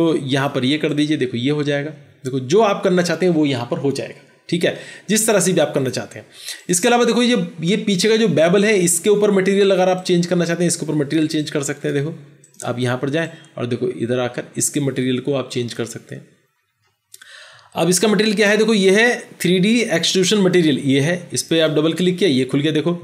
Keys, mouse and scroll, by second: 21.4 double click.